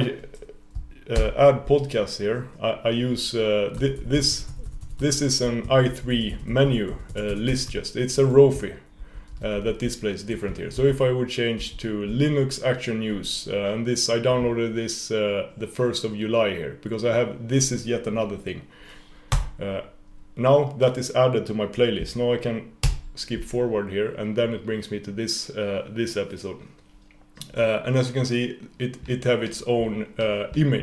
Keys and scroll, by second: 1.2 super+o, 22.8 super+].